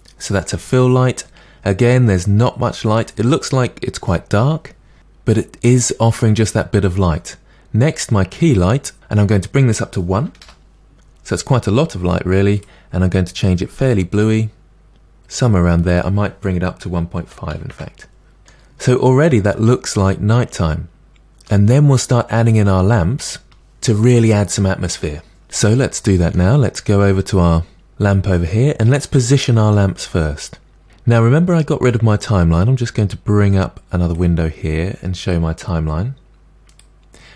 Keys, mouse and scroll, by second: 0.4-8.0 middle drag, 8.0 click, 14.1 click, 17.7 click, 18.5-21.1 middle drag, 25.7 middle click, 26.6 scroll up 4, 27.8 click, 28.5-32.7 shift+middle drag, 32.7-37.3 drag.